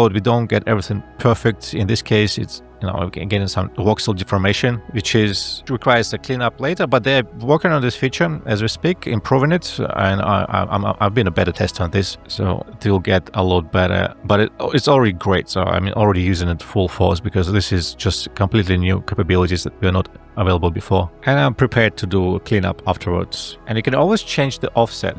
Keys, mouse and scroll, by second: 5.7 alt+`, 14.6 space.